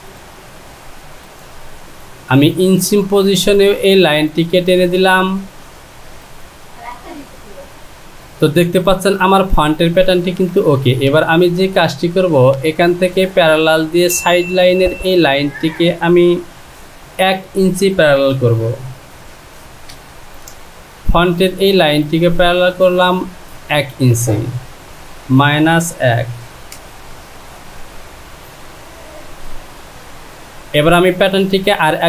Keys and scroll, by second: 17.4 Down, 18.4 KP_Subtract, 19.4 KP_1, 24.4 Down, 25.4 KP_Subtract, 26.7 Return.